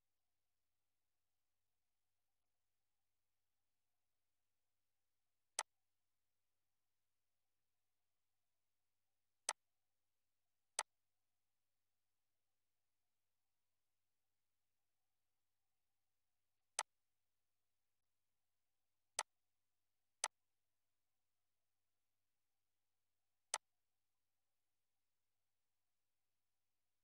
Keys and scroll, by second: 6.7 BackSpace, 7.4 1, 8.1 0, 22.0 BackSpace.